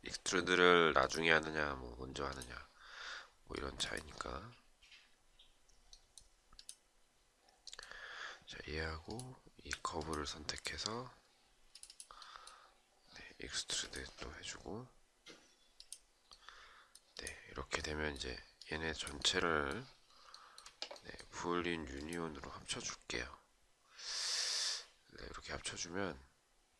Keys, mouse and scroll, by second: 8.6 shift+click, 19.9 shift+right click.